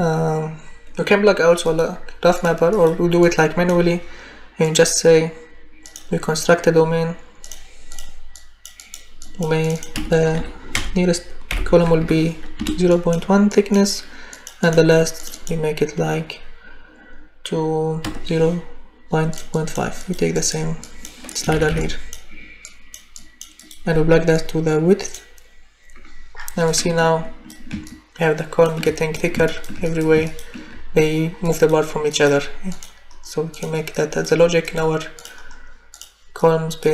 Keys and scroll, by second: 9.9 0, 10.7 BackSpace, 12.6 Return, 18.0 0, 21.5 ctrl+c, 21.7 ctrl+v.